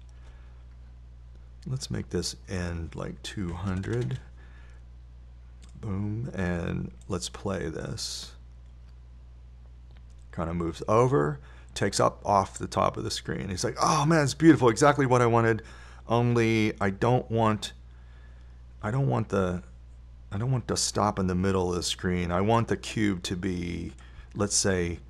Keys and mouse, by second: 1.1 i, 5.3 KP_0, 18.0 click, 18.4-20.1 drag.